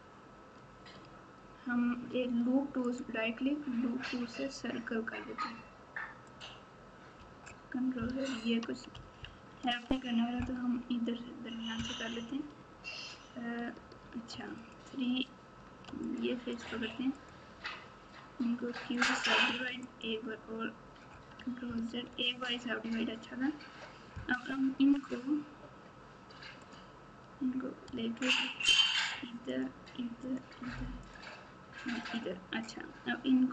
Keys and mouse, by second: 2.8 right click, 2.9-6.4 middle drag, 9.5 ctrl+z, 14.3 3, 14.5 click, 16.0 click, 17.1 click, 18.5 q, 19.4 q, 22.0 ctrl+z, 28.7 ctrl+click, 30.2 ctrl+click, 31.1 ctrl+click, 32.0 ctrl+click.